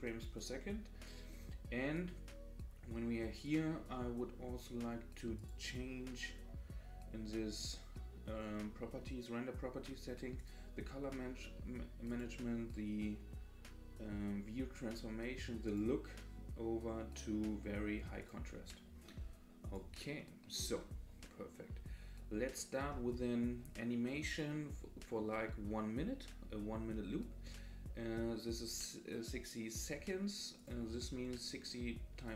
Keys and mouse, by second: 3.4 click, 5.5 click, 10.4 click, 12.1-14.1 drag, 15.8-18.5 drag, 19.7 click, 20.2 middle click, 21.2-22.4 middle drag, 24.7-25.2 middle drag, 30.6-32.3 drag.